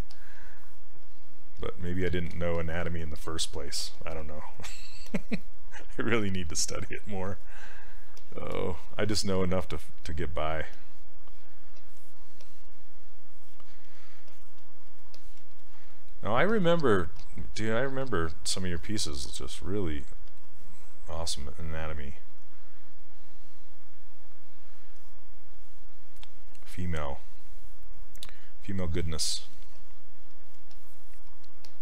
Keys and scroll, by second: 2.2 ctrl+z, 17.2 s.